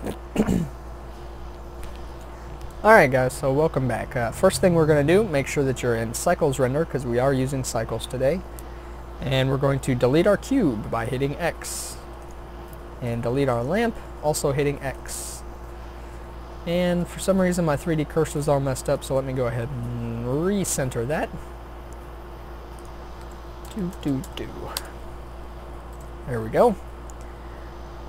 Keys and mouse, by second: 11.6 x, 13.5-15.3 drag, 14.5 x, 18.4-20.7 drag, 20.7-22.8 middle drag, 22.8-24.3 drag, 24.6-25.9 middle drag, 25.9 n.